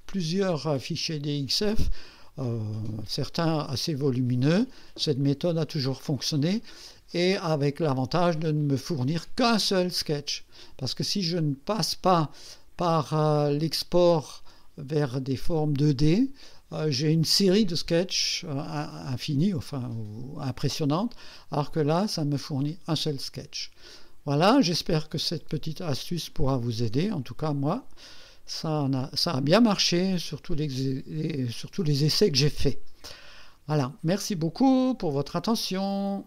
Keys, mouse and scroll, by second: 8.4 click, 9.2 scroll down 1, 13.4 scroll up 2, 16.6-17.0 scroll down 2.